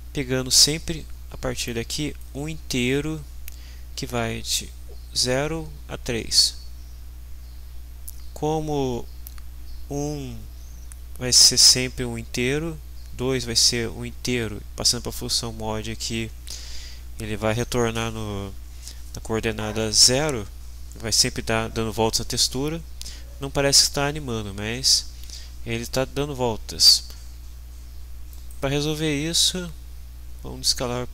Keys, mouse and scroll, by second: 1.6 click, 28.4 right click.